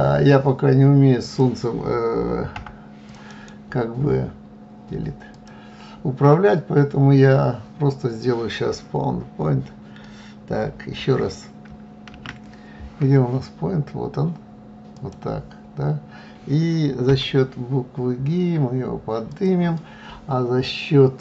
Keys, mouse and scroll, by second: 0.0 click, 1.0 Delete, 1.5 click, 1.9-13.8 right drag, 15.8 g.